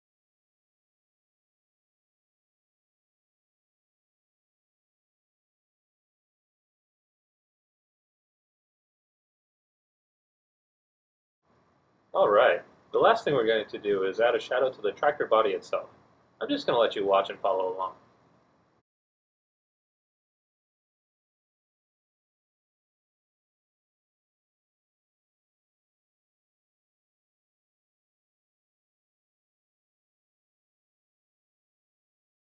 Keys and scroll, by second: 2.7 d, 21.8 e, 22.8 Caps_Lock, 23.1 F1, 25.4 d.